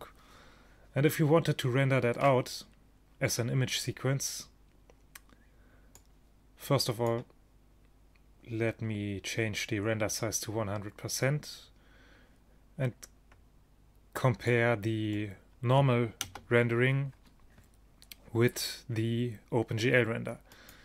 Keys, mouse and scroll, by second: 0.0 Escape, 3.2-8.7 drag, 14.6-19.0 middle drag, 16.3 KP_0, 20.6 click.